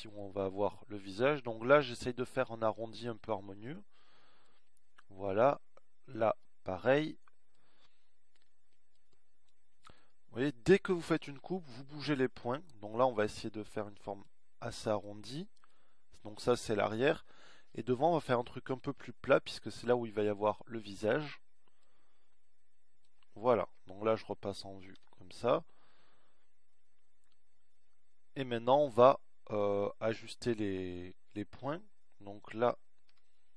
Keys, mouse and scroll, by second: 0.8-3.1 middle drag, 6.0 middle click, 7.3 middle click, 8.4 middle click, 20.3-21.3 middle drag, 22.8-24.4 middle drag, 24.7 KP_1, 26.0 z.